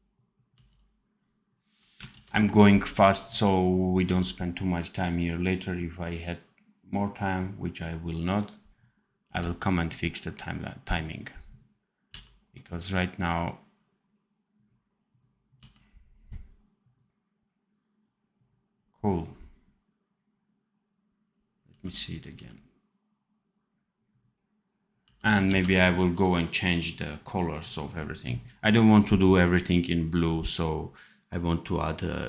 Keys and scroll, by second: 0.5 d, 2.1 ctrl+s, 3.9 d, 9.2 v, 12.0 v, 15.5 d, 21.6 d, 22.3 d, 24.9 d, 25.4 ctrl+s.